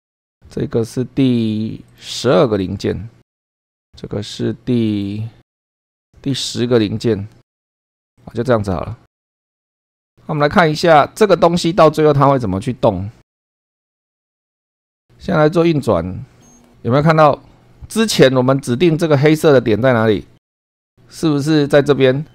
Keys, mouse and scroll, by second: 0.1 click, 0.9 scroll up 2, 1.9 click, 2.2 space, 3.0 scroll up 2, 3.5-4.9 scroll down 2, 4.9 click, 5.5-6.0 scroll up 2, 6.0 click, 6.3 space, 7.4 click, 8.1 click, 9.7 click, 10.3 shift+middle click, 11.2-11.5 shift+scroll down 3, 11.7 shift+middle click, 13.6 click, 13.8 click, 14.3 click.